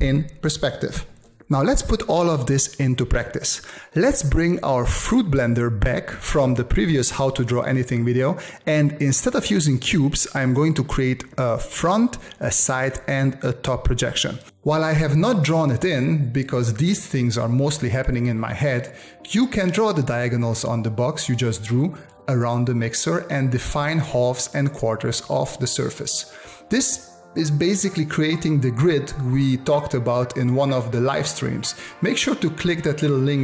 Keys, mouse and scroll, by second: 0.6-1.9 drag, 1.9 space, 2.7 click.